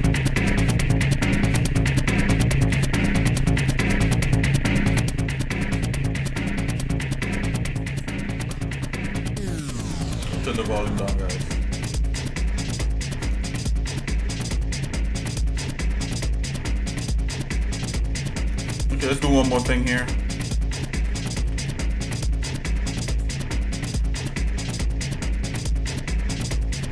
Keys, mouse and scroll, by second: 2.7 l, 13.5 shift+middle click, 14.5 shift+middle click, 16.0-18.3 shift+middle drag, 18.8 click, 21.4 i, 23.0 i, 23.8 s.